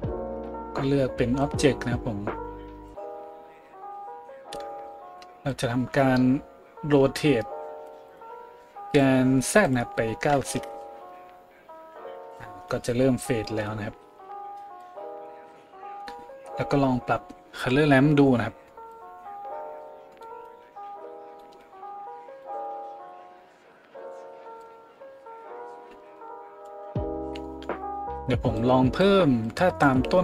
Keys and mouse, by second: 9.0 middle click, 9.6-30.2 drag.